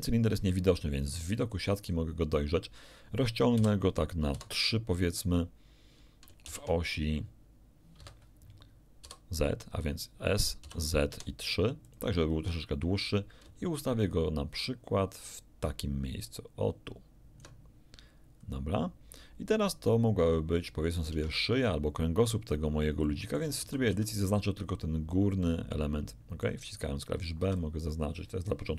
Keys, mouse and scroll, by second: 0.3 z, 1.9 scroll up 2, 3.5 s, 4.3 3, 6.5 shift+z, 8.0 Escape, 9.0 s, 10.6 z, 11.1 3, 11.9 click, 12.4 scroll down 2, 13.4-17.6 ctrl+drag, 18.4-18.8 scroll up 2, 21.1 Tab, 23.1 shift+click, 23.6 shift+a, 23.9 shift+b, 24.1 shift+click, 25.4 click, 25.5-26.6 middle drag, 27.4 b, 27.5 click.